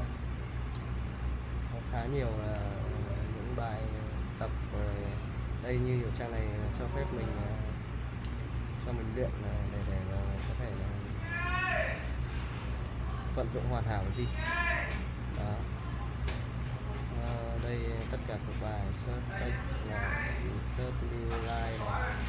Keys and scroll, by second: 13.4 Return, 14.0 Return.